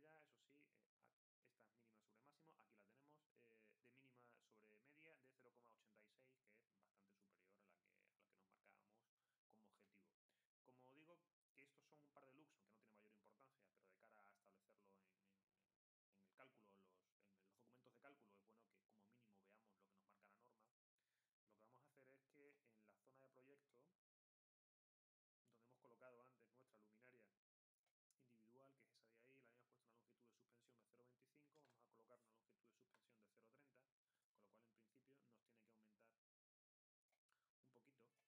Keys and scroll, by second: 31.2-32.1 typing.